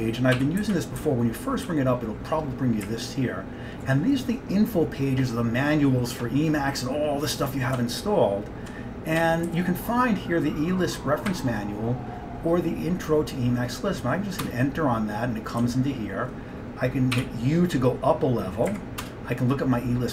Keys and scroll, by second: 0.4-1.8 typing, 2.9 Up, 3.4-3.9 Up, 4.0 Up, 7.8 Down, 8.3-8.8 Down, 9.3 Down, 9.6 Right, 11.4 Down, 14.5 Return, 15.7 Down, 16.2 Down, 17.2 u, 18.8 Up, 19.1 Return.